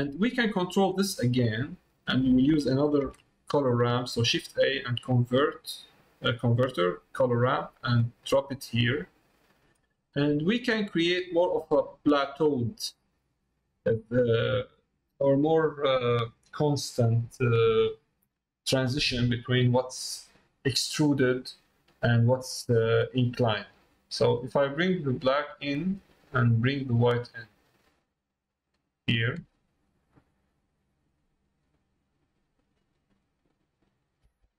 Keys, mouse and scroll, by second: 0.8 middle click, 2.0 middle click, 8.9 click, 24.8-26.2 drag, 26.9-29.4 drag, 30.3-32.7 drag, 33.7 middle click.